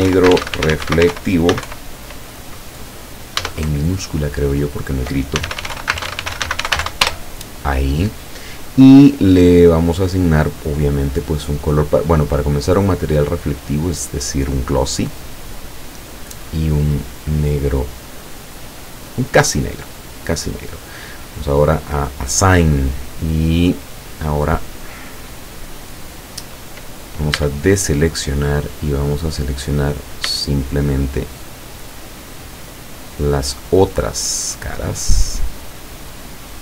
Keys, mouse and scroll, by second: 0.0-1.7 typing, 3.5 Caps_Lock, 3.7 BackSpace, 5.4-6.9 typing, 7.1 Return, 11.1 click, 12.0-12.3 scroll up 1, 12.8-13.1 scroll down 1, 14.6 click, 15.6 click, 16.8-19.6 drag, 21.5 click, 22.9-23.4 scroll down 2, 23.5 middle click, 24.2 middle click, 25.3 middle click, 25.7-26.3 scroll up 2, 26.5 scroll down 2, 27.4 a, 28.1-29.5 middle drag, 29.9 right click, 30.7 shift+right click, 31.3 shift+right click, 31.9 shift+right click, 32.4 shift+right click, 33.2 shift+right click, 33.6 shift+right click, 34.3 shift+right click, 34.9 shift+right click, 35.4 shift+right click, 36.0 shift+right click.